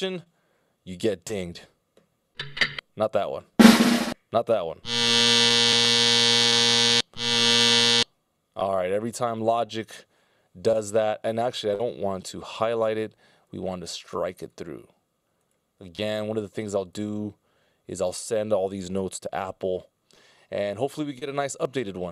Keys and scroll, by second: 12.1 super+z.